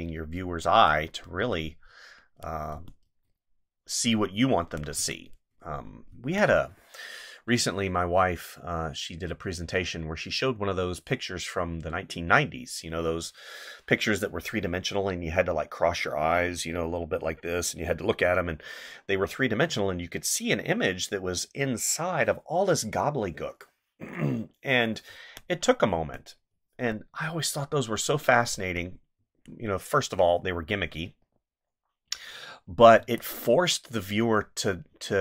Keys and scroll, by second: 1.4 space, 2.7 space, 4.9 space, 25.0 space, 28.5 space, 33.0 space.